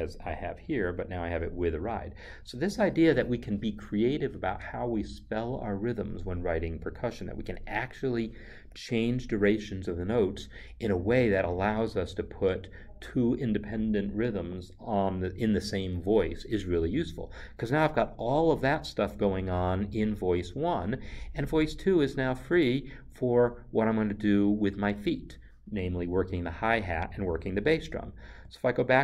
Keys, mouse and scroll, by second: 28.3 n.